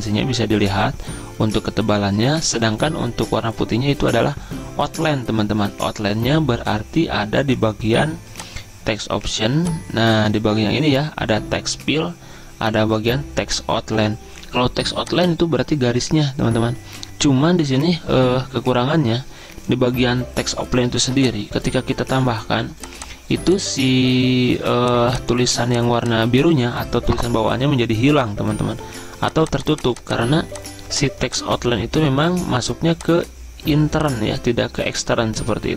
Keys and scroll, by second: 21.6 ctrl+a.